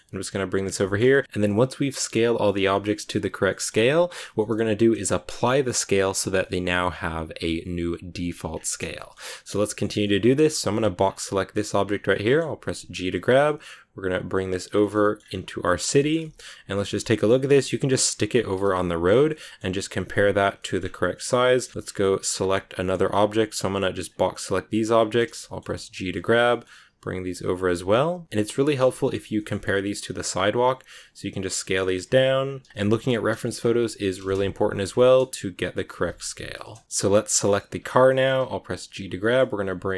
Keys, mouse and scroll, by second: 0.7 shift+middle click, 1.0 g, 1.2 middle click, 1.3 scroll up 1, 1.4-5.9 middle drag, 5.9-6.3 scroll up 1, 6.3-8.4 middle drag, 8.4-8.8 scroll down 2, 8.8-9.9 shift+middle drag, 9.9-10.3 scroll up 3, 10.1 shift+middle click, 10.6 b, 11.7 scroll down 2, 12.0-13.0 shift+middle drag, 13.0 g, 14.6 scroll down 1, 14.7 shift+middle click, 15.1 scroll up 2, 15.4 scroll down 1, 15.5 middle click, 15.8 scroll up 1, 16.1 g, 16.7 middle click, 17.0 g, 18.5 KP_Decimal, 19.0 scroll down 6, 19.2 middle click, 19.8 s, 20.5 middle click, 20.7 scroll up 1, 20.9 s, 21.3 middle click, 21.7 s, 21.7-23.1 shift+middle drag, 23.1 b, 25.0 scroll down 2, 25.2 shift+middle click, 25.9 g, 28.1 KP_Decimal, 28.3 scroll down 1, 28.6 middle click, 29.2 g, 30.1 middle click, 30.2 scroll up 2, 30.5 s, 31.5 middle click, 31.8 s, 32.7 shift+middle click, 33.5 shift+scroll up 2, 33.8 g, 34.8 scroll down 1, 34.8 middle click, 35.4 right click, 35.7 g, 36.8-37.5 scroll up 2, 37.5 right click, 37.7 scroll down 2, 38.0 shift+middle click, 38.8 g.